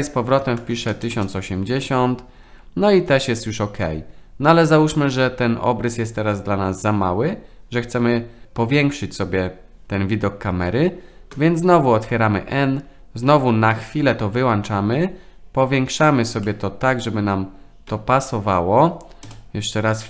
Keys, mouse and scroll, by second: 11.3 n, 13.7 click, 16.4-16.9 middle drag, 17.2 n, 17.9 n, 19.2 KP_0.